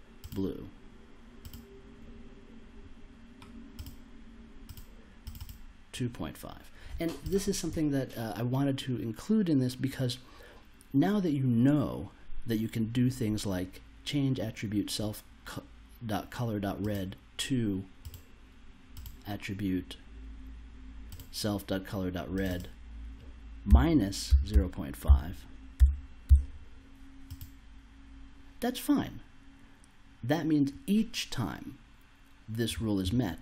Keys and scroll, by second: 23.7-26.2 typing.